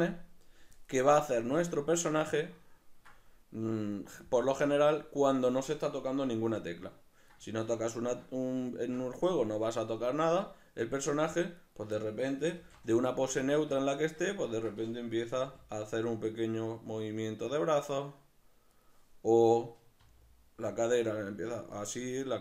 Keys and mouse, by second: 1.2-11.6 middle drag, 11.6 right click, 12.0-18.8 middle drag, 12.5 alt+q, 13.5 alt+q, 15.4 g, 18.8 right click, 19.5 right click, 20.1 r, 22.2 right click.